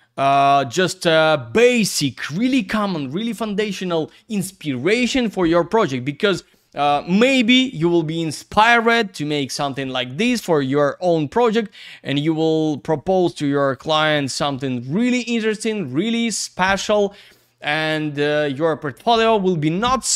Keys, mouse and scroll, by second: 12.0 click, 12.2 click, 12.7 click, 12.8 click, 13.7 typing, 14.1 Return, 15.4 click, 15.5 click.